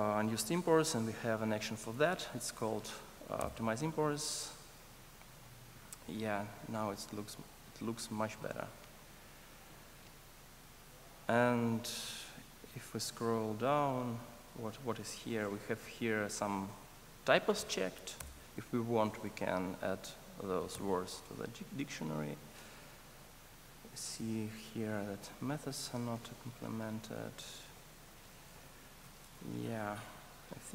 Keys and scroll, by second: 3.5 ctrl+alt+o, 18.2 alt+Return.